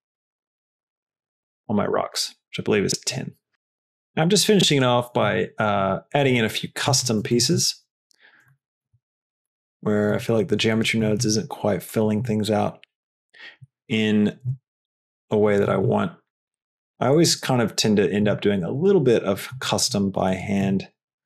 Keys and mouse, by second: 0.6-2.7 drag, 3.5 shift+d, 3.5 g, 5.5 g, 6.5 s, 7.5 g, 9.1 g, 10.5 g, 11.2 g, 12.4 g, 14.6 shift+d, 15.8 g, 18.3 g, 19.8 g, 20.8 g.